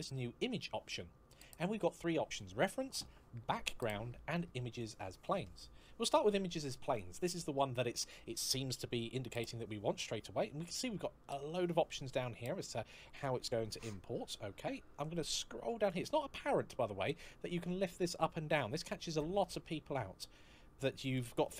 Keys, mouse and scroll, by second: 6.6 click, 11.6-12.9 scroll down 1, 12.9-14.5 scroll up 1, 14.8 click, 17.1 click, 18.9 click.